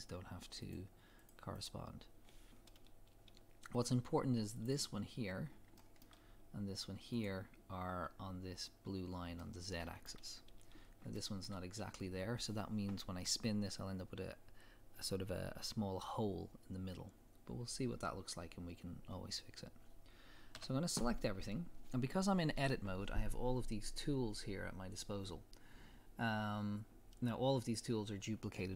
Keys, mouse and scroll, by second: 0.6 click, 1.2 click, 1.5 click, 2.3 scroll down 1, 3.7 scroll up 1, 4.5 click, 5.5 scroll down 1, 5.8-7.1 shift+middle drag, 6.2-6.5 scroll up 1, 7.1 click, 9.4-18.5 shift+middle drag, 10.7-11.1 scroll up 1, 17.5-17.8 scroll down 1, 19.2-19.8 scroll up 1, 20.5 a.